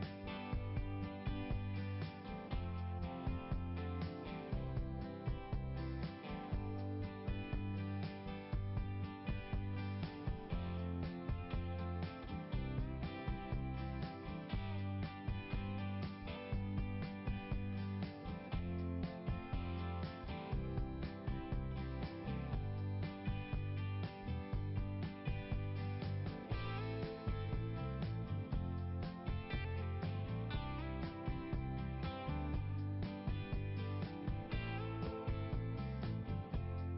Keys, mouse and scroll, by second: 1.2 click, 2.2 click, 7.1-7.4 scroll down 1, 12.5 click, 14.5 click, 18.6 click, 20.1 click, 24.2 click, 25.0 click, 27.2 click, 27.8 click, 28.2 click, 33.1 click.